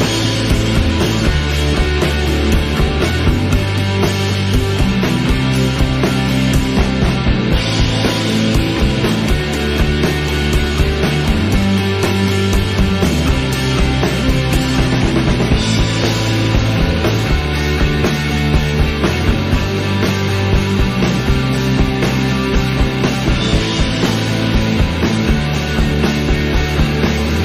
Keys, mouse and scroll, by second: 0.5 s, 1.8 s, 2.5 s, 3.1 s, 3.5-3.8 scroll up 10, 3.8-4.2 shift+middle drag, 4.2 click, 5.1 s, 6.8 r, 8.5 shift+middle click, 8.8-9.3 scroll up 3, 9.3 click, 11.4 scroll down 2, 11.5-12.3 middle drag, 12.3 scroll down 1, 12.5-12.9 middle drag, 12.9 click, 13.8 s, 14.8-15.9 middle drag, 15.9 scroll up 1, 16.2-16.9 shift+middle drag, 16.9-17.6 scroll up 3, 17.3 shift+middle drag, 17.6 middle click, 17.9 Tab, 18.4 alt+a, 18.5 click, 19.3 shift+s, 20.6 Tab, 20.8 shift+a.